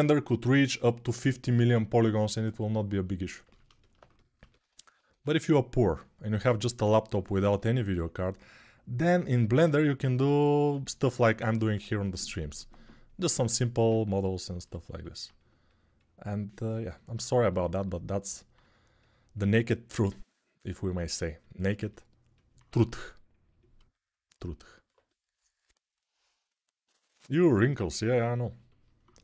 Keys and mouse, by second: 4.9 1.